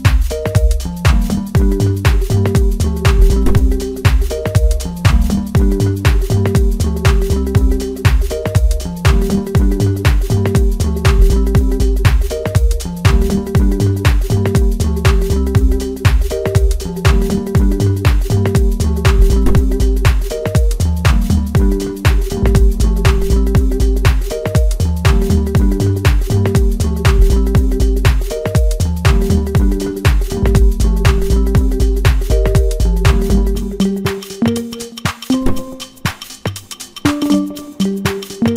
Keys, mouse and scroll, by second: 1.8 i, 2.9-3.8 scroll down 8, 3.8 middle click, 4.2-4.5 scroll down 1, 4.5 middle click, 5.0 Tab, 6.3 click, 6.7-7.1 scroll up 2, 7.1-9.6 middle drag, 9.6 KP_1, 10.5-11.0 middle drag, 11.0 scroll up 2, 11.4 Tab, 11.7-12.1 scroll up 2, 12.1-13.6 middle drag, 13.6 2, 14.2 click, 14.4 click, 15.0 s, 17.4 ctrl+r, 21.9 ctrl+r, 25.3 Tab, 25.8-26.2 scroll down 4, 26.2-27.1 middle drag, 27.1 scroll up 2, 27.4 Tab, 27.8-29.1 scroll up 1, 29.1 g, 32.2 ctrl+r, 36.0 Tab, 36.6-37.2 scroll down 7, 37.2-38.5 middle drag.